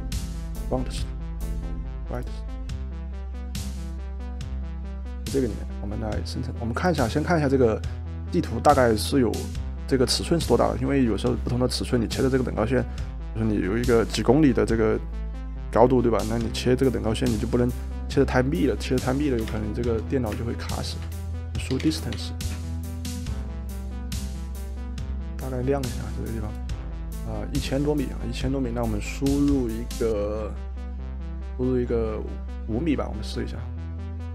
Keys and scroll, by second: 19.2-22.8 typing.